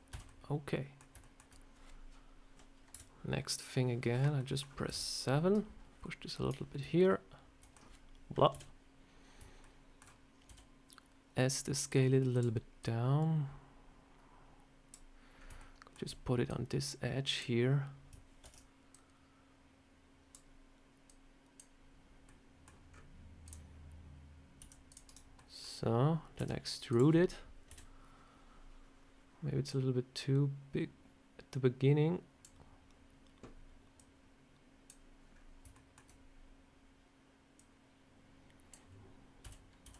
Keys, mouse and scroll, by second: 0.0 a, 0.2 middle click, 1.1 shift+middle click, 1.3 shift+middle click, 2.8 KP_7, 4.3 middle click, 4.8 KP_7, 6.9 middle click, 8.4 KP_7, 9.5 shift+middle click, 10.4 s, 12.7 click, 15.3 scroll up 2, 15.5 shift+middle click, 16.4 click, 17.2 click, 18.3 ctrl+z, 18.8 click, 21.0 click, 22.2 middle click, 22.8 scroll up 4, 23.3 click, 24.5 c, 25.3 middle click, 25.7 scroll down 2, 26.3 e, 27.6 KP_7, 29.6 click, 33.9 click, 35.2 scroll down 2, 35.6 shift+middle click, 37.5 click, 39.3 a, 39.7 s.